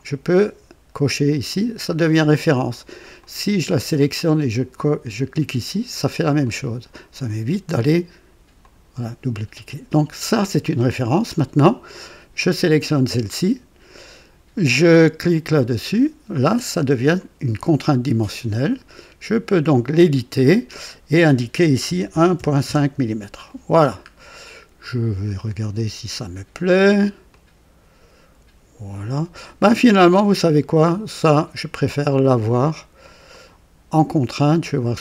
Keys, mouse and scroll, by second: 1.4 click, 3.1 click, 4.7 click, 6.3 click, 8.6 click, 12.6 click, 15.4 click, 17.1 right click, 19.6 click, 21.8 KP_1, 22.0 KP_Decimal, 22.3 KP_5, 22.6 KP_Enter, 23.7 scroll down 2, 24.3-24.9 right drag, 24.7 typing, 25.1 scroll up 2, 27.2-29.2 drag, 30.5 click, 31.3 typing, 32.1 click, 33.3 click.